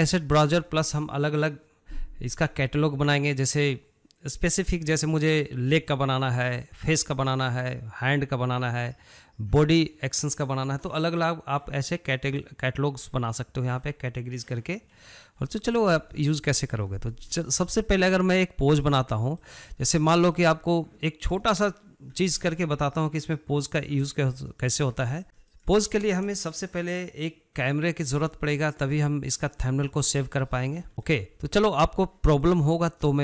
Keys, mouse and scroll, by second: 0.2-3.8 shift+middle drag, 15.6-16.8 shift+middle drag, 16.8 scroll up 1, 17.0-18.9 shift+middle drag, 18.9 click, 19.4-19.9 shift+middle drag, 19.9-20.4 scroll up 1, 20.4-23.7 shift+middle drag, 23.7-24.8 drag, 24.8-25.2 shift+middle drag, 25.2-25.5 scroll down 3, 25.5-28.3 middle drag, 28.3-30.0 drag, 30.0 shift+middle click, 30.3 scroll down 1, 30.6 middle click, 30.9 scroll up 1, 31.1-32.6 shift+middle drag, 32.6-33.2 drag.